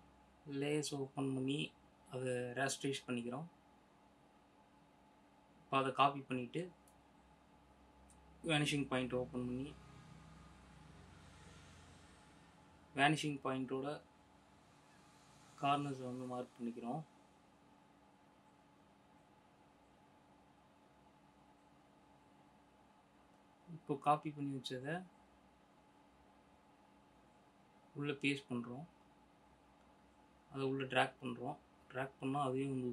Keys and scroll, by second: 0.2 F7, 5.0 ctrl+a, 6.3 ctrl+x, 14.2 ctrl+-, 28.9 ctrl+v.